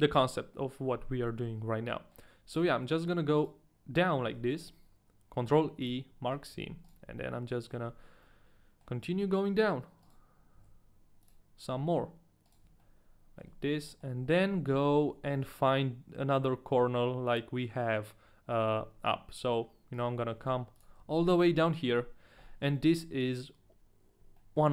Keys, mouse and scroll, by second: 1.3 middle click, 3.8 middle click, 3.8 ctrl+right click, 4.4 ctrl+e, 4.4 middle click, 4.4 ctrl+right click, 6.5 a, 6.8 right click, 7.7 right click, 7.7 shift+middle click, 7.7 a, 7.9 scroll down 1, 8.9 right click, 8.9 shift+middle click, 8.9 scroll down 1, 8.9 a, 10.7 ctrl+e, 10.7 shift+middle click, 10.7 ctrl+right click, 10.7 scroll down 1, 11.7 a, 12.5 right click, 13.5 ctrl+e, 13.5 right click, 13.5 shift+middle click, 13.5 a, 13.9 middle click, 14.1-14.6 scroll up 2, 15.1 right click, 15.1 shift+middle click, 15.7 shift+middle click, 20.4 ctrl+e, 20.4 ctrl+right click, 21.0 a, 22.4 scroll down 2, 23.0 ctrl+e, 23.0 shift+middle click, 23.0 a, 24.6 shift+middle click, 24.6-24.7 scroll up 3.